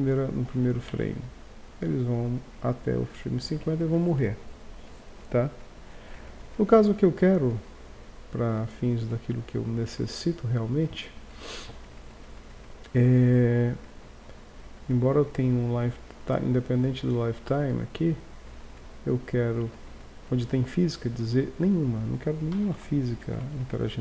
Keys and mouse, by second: 0.9 alt+a, 3.6 Escape, 20.9 middle click, 21.6-22.8 drag, 22.8 alt+a, 23.5 Escape.